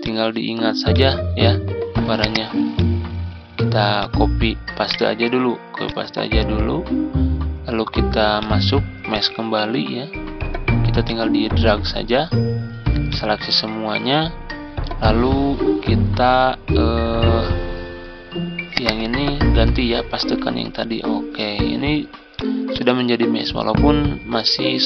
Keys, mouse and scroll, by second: 4.7 right click, 5.7-18.8 drag, 22.2 click, 23.2 ctrl+scroll up 1.